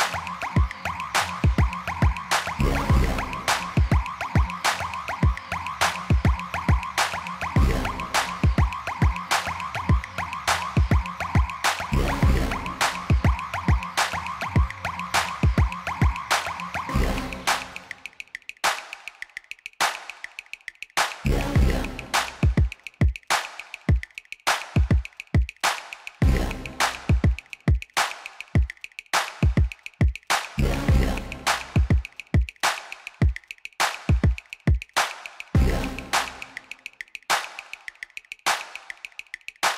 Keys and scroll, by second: 3.2 Tab, 4.0 a, 5.0 Tab, 7.0 alt+a, 10.4 3, 14.7 shift+a, 19.3 Tab, 20.0 s, 23.7 s, 24.1 x, 29.4 3, 31.5 g, 31.8 z, 35.1 g, 35.5 z, 38.9 ..